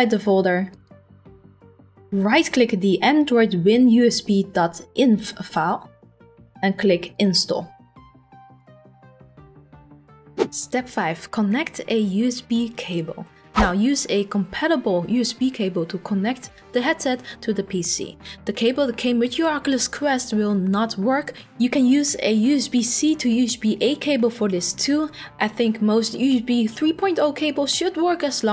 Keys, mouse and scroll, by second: 0.8 click, 1.0 click, 5.3 right click, 7.2 click, 8.6 click.